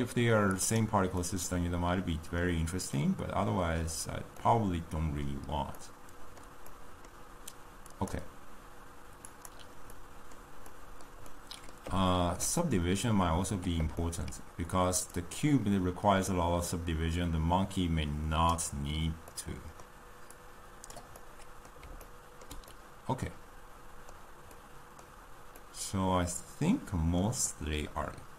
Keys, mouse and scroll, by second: 19.3-28.3 middle drag.